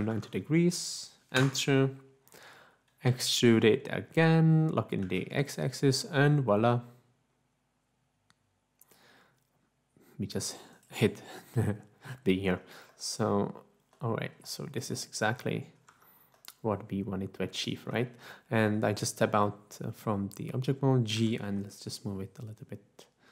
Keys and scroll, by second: 1.3 Return, 3.0 e, 5.0 x, 17.5 Tab, 21.2 g, 22.2 z.